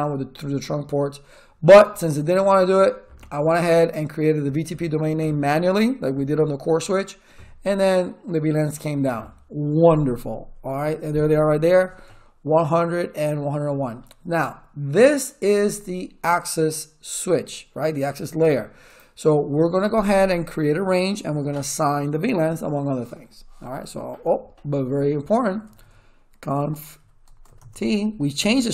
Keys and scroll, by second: 25.1-27.4 typing, 27.6 Return.